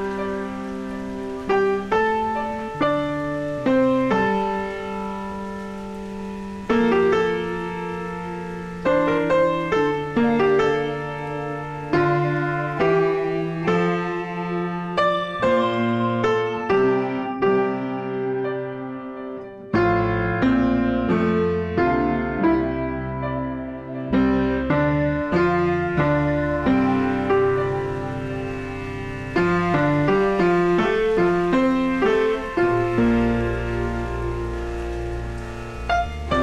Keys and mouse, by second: 3.1 ctrl+shift+x, 3.3 click, 5.1 Return, 6.4 click, 7.0 ctrl+shift+x, 7.3 click, 7.9 Up, 9.8 click, 10.8 click, 14.0 KP_0, 14.2 Return, 15.1 click, 15.6 KP_0, 16.0 Return, 17.2 click, 17.6 KP_0, 17.9 Return, 18.9 click, 25.1 Return, 27.5 click, 33.0 ctrl+e, 33.1 ctrl+click, 34.3 ctrl+1, 34.3 ctrl+click, 34.5 right click, 35.2 click.